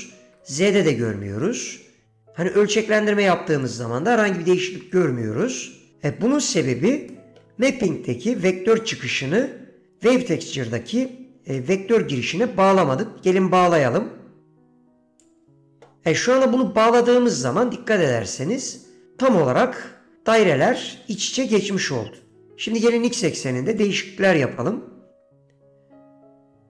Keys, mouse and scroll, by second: 0.0 click, 0.4 ctrl+z, 1.2 middle click, 3.0 click, 4.8 ctrl+z, 6.0 middle click, 7.2 middle click, 9.3 middle click, 11.7 middle click, 12.3 middle click, 12.9 middle click, 14.5-15.5 drag, 17.2 middle click, 18.4 middle click, 23.9-26.6 shift+drag.